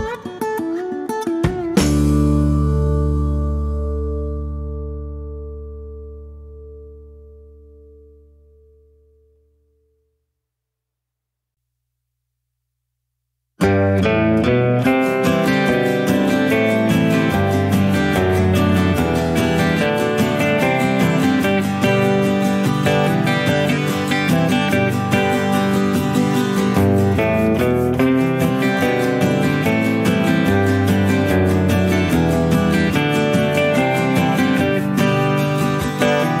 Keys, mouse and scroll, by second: 0.0 click, 3.6 click, 6.5 click, 8.1 click, 11.2 click, 13.1 click, 13.4 click, 13.8 click, 15.5 click, 16.4 click, 17.7 click, 19.1 click, 20.9 click, 21.8 middle click, 24.1 click, 25.6 click, 26.8 click, 28.6 click, 30.5 click, 31.9 click, 32.5 shift+click, 34.5 click, 35.4 click.